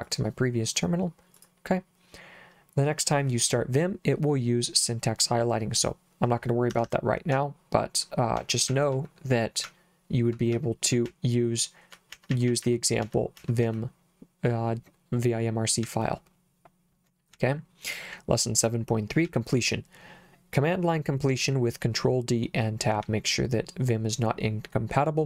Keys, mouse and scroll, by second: 0.1 click, 1.4 click, 6.7 Escape, 7.3 h, 8.4-11.1 typing, 12.1-13.6 typing, 15.8 j, 17.3 j, 19.3 j, 23.0 j.